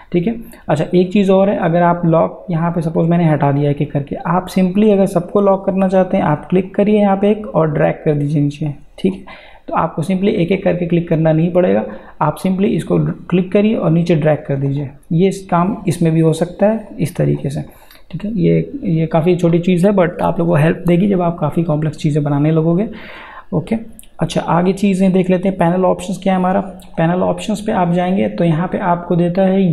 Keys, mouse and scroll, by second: 2.9 click, 6.7-17.7 drag, 22.6 click, 26.8 click.